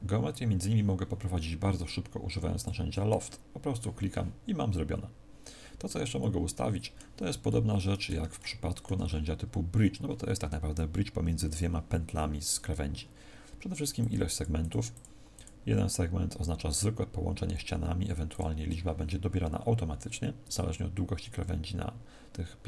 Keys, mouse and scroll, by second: 2.5 click, 4.6 middle click, 6.1 middle click, 8.3 middle click, 8.9 shift+middle click, 13.9 click, 14.2 click, 18.2 click.